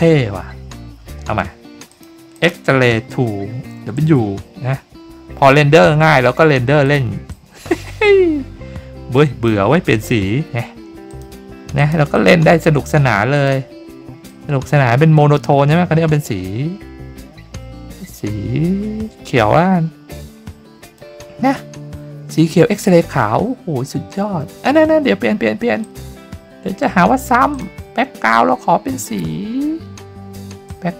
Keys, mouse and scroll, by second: 1.9 click, 2.3 click, 6.8 click, 7.3-9.4 drag, 11.1 click, 11.7 click, 12.1 click, 13.3 click, 14.2-20.9 drag, 25.8 click, 27.5 click, 29.0-30.3 drag, 30.6-30.9 drag.